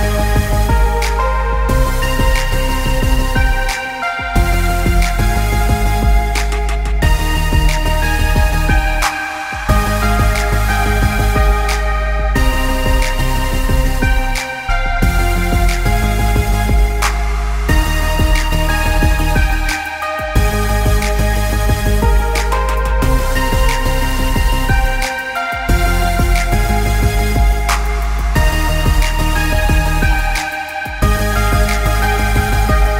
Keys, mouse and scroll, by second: 0.6 click, 2.6 click, 3.8 shift+click, 4.4 click, 9.0 click, 11.1 scroll up 1, 12.3 click, 13.0 right click, 14.2 click, 16.4 Down, 17.8 click, 18.7 Up, 19.8 click, 24.7 click, 25.5 ctrl+z, 26.0 alt+scroll up 1, 27.0 click, 30.1 click, 31.8 space, 31.9 click, 32.3 space, 32.7 click.